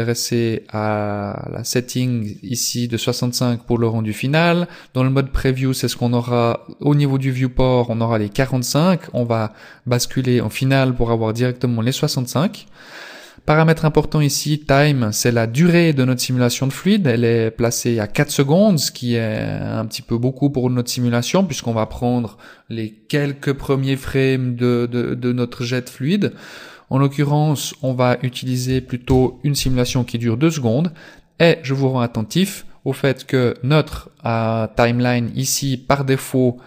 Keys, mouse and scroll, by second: 9.0 click, 27.6 click, 36.1 click.